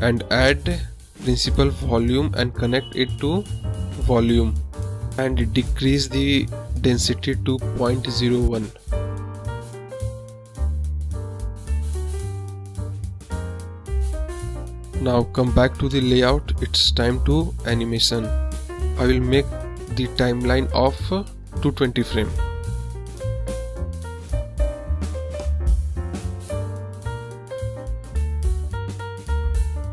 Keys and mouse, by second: 0.2 KP_0, 2.4 click, 3.1 shift+a, 7.0-7.8 drag, 9.1-11.0 drag, 15.1 click, 16.0-16.8 middle drag, 16.8 drag, 17.0 middle click, 18.0 click, 19.2 click, 22.9 click, 24.3 click, 27.3-29.5 drag.